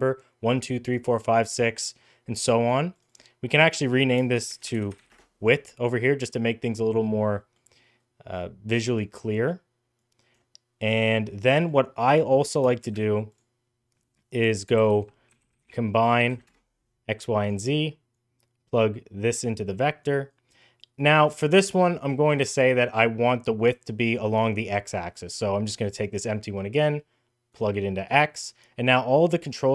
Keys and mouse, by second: 2.9-5.6 drag, 7.3 middle click, 8.2 click, 9.8 click, 11.9 click, 12.6 shift+a, 18.1-19.2 drag, 19.8 click, 20.6 click, 24.9 click, 25.7-27.3 drag, 29.6-29.7 drag.